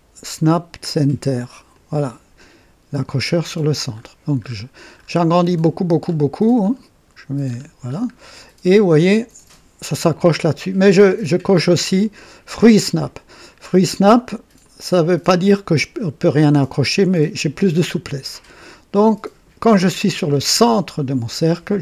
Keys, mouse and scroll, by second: 1.7 click, 3.9-6.9 scroll up 8, 7.4-8.2 scroll up 3, 14.6 click.